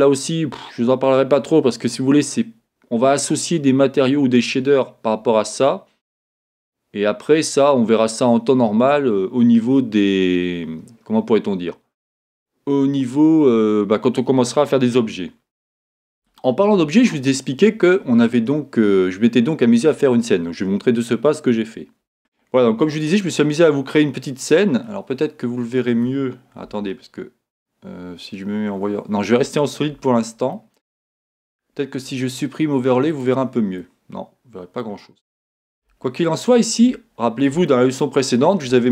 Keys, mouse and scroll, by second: 7.6-22.2 drag, 23.1-33.1 middle drag, 26.7 z, 30.0 Escape, 33.1 click, 33.2-38.9 middle drag, 34.9-35.9 scroll up 2, 37.1-37.5 scroll up 2.